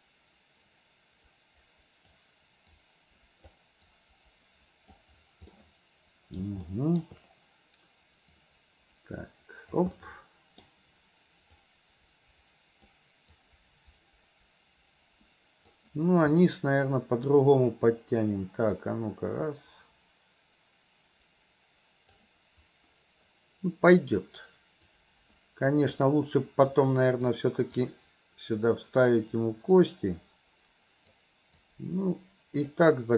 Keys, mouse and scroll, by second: 2.8 click, 3.9-5.0 drag, 5.6 middle click, 6.7-8.4 middle drag, 8.4-9.8 drag, 10.0 middle click, 11.7-12.9 drag, 13.4-15.8 drag, 16.4 middle click, 18.8-22.2 drag, 24.9-26.0 drag, 26.8 click, 27.8-29.0 drag, 29.8-31.2 drag, 31.7-32.8 drag.